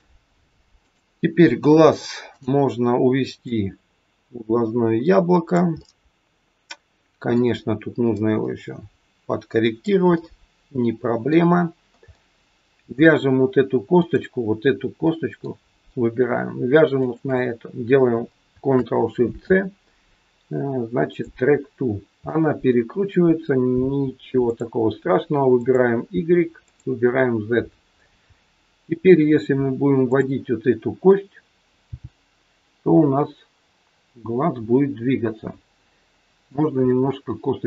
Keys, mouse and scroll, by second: 0.8 click, 2.3 click, 3.3 click, 5.6 middle click, 8.2 click, 10.0 middle click, 12.0 middle click, 13.9 click, 15.0 middle click, 16.9 shift+click, 19.3 ctrl+shift+c, 21.6-22.3 scroll down 3, 22.3 middle click, 24.4 click, 25.5 click, 27.9-28.3 scroll up 3, 28.3 middle click, 29.0-29.6 scroll down 2, 30.0 click, 31.9 g, 36.8 middle click.